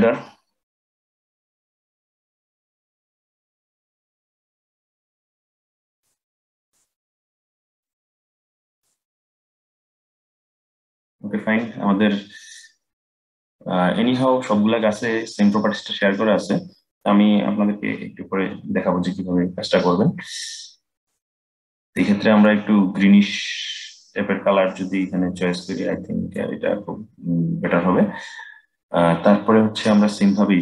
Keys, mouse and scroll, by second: 7.5-10.6 drag, 20.6 click, 28.7-30.6 middle drag.